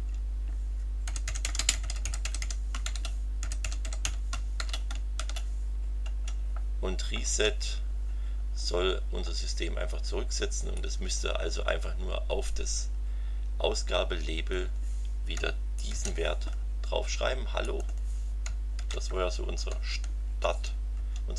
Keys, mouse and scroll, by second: 0.8-5.1 typing, 6.0 Return, 7.2 Return, 8.4 scroll down 2, 10.7-14.7 drag, 15.9 ctrl+c, 17.6 click, 18.8 ctrl+v, 19.5 Home, 20.4 Tab.